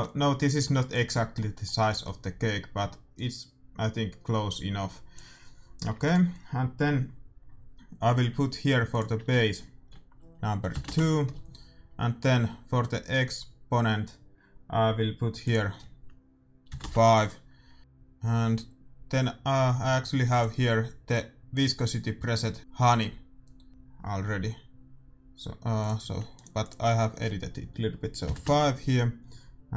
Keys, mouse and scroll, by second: 3.1-4.9 drag, 5.8 a, 6.0-7.6 right drag, 8.8-10.7 drag, 15.4-17.2 drag, 21.9 click, 25.7-28.3 drag.